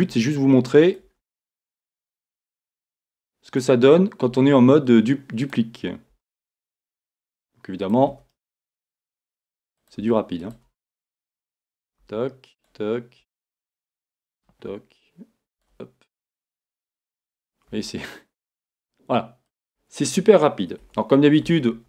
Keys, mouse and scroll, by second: 3.6 click, 6.1 e, 20.8 Tab, 21.7 a.